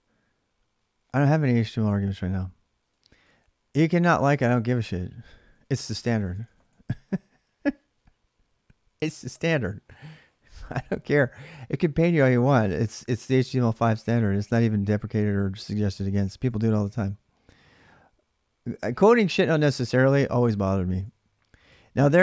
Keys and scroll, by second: 3.5 ctrl+[, 3.7-6.9 typing, 10.8 alt+Tab, 16.2 alt+Tab, 20.7 alt+Tab, 21.4 alt+Tab.